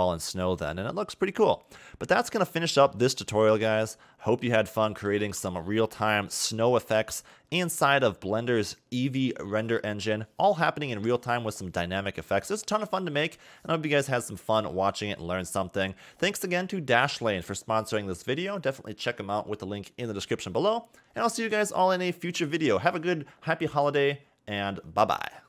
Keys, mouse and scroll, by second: 0.8 middle click, 2.5 a, 2.6 a, 3.6 middle click, 6.5 KP_0.